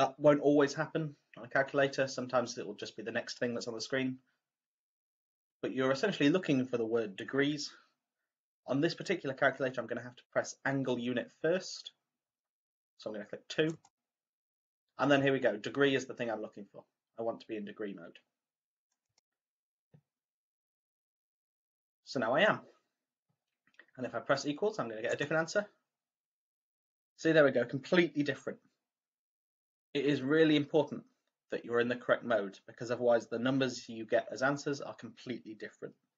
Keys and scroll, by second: 13.6 2, 19.0 1, 25.1 =.